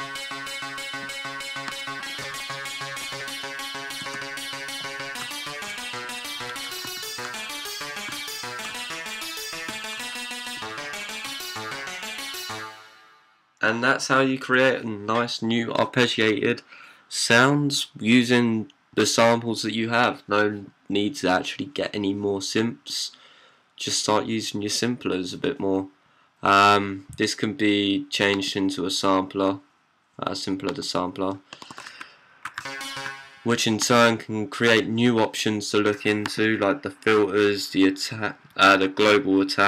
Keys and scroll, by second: 4.7-12.3 typing, 14.8-15.5 typing, 31.8 c, 33.0 d, 34.0-35.4 typing.